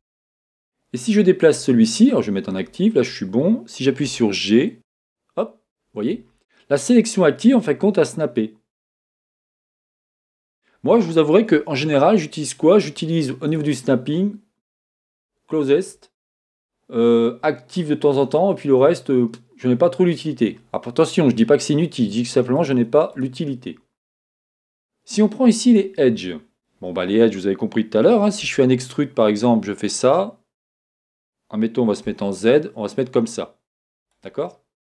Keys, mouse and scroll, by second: 1.4-34.1 drag, 4.0 g, 11.7 Escape, 28.4 e, 34.5 middle click.